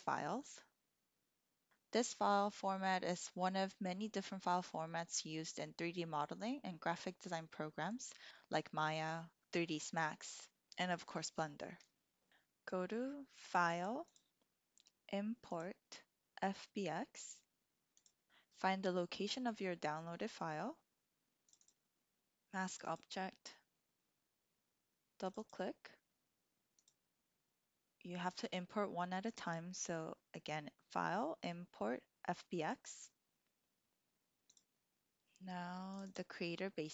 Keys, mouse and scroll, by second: 13.7 click, 14.2-18.3 drag, 29.3-34.5 drag.